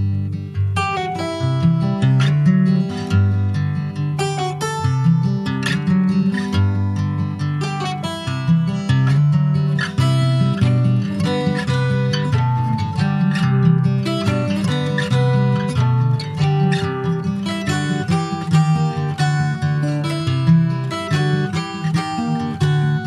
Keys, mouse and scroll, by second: 0.0 click, 0.3 middle click, 0.7 ctrl+s, 0.8 ctrl+click, 1.4 middle click, 2.0 ctrl+s, 2.0 click, 2.3-3.9 middle drag, 3.9 ctrl+s, 4.0 ctrl+click, 4.2 middle click, 4.5 ctrl+s, 4.7 click, 4.9 shift+a, 6.4 alt+middle click, 6.9 scroll up 4, 7.3 shift+middle click, 8.2 click, 11.2-11.6 scroll up 2, 11.6 shift+middle click, 11.9 s, 15.2 s, 19.5 alt+middle click, 20.3 ctrl+s, 20.5 scroll up 1, 20.7 shift+middle click, 21.0 scroll up 1, 21.7 click.